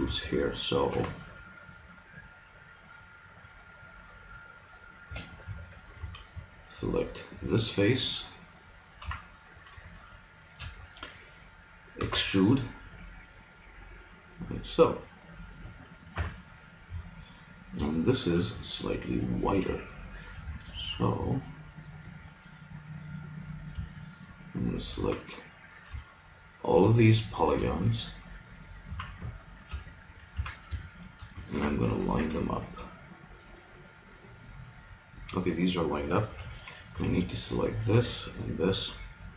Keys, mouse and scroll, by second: 0.9 ctrl+r, 6.0 ctrl+Tab, 7.2-8.8 drag, 8.8 middle click, 9.1 click, 9.1 KP_3, 12.0 e, 14.6-16.4 drag, 16.2 KP_Decimal, 19.4 middle click, 20.8 ctrl+Tab, 24.2-27.3 middle drag, 25.0 z, 27.3 click, 28.5 middle click, 28.8 z, 29.7 KP_1, 30.4 z, 36.3 a, 37.0 b, 38.0 b.